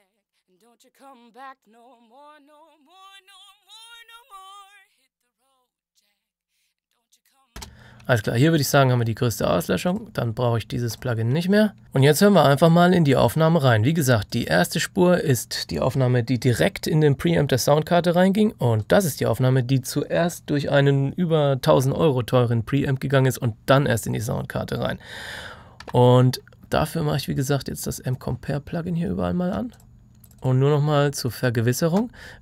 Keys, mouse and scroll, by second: 7.5 space, 9.8 click, 11.8 F9, 14.2 click, 18.7 click, 25.7 click, 25.8 F3, 27.3 click.